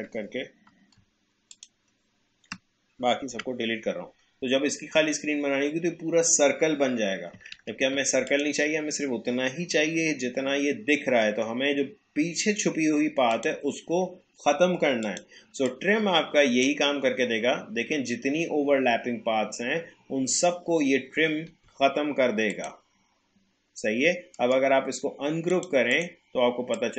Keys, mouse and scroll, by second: 1.5 shift+click, 3.3 Delete, 7.3 Delete, 7.5 ctrl+z, 8.3 click, 13.3-19.3 drag, 22.5 click, 24.3 right click, 25.5-26.9 drag.